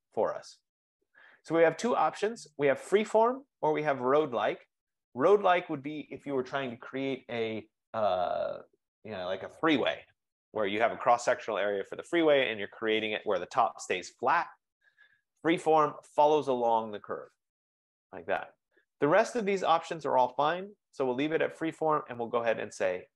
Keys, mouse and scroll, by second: 0.0-2.1 drag.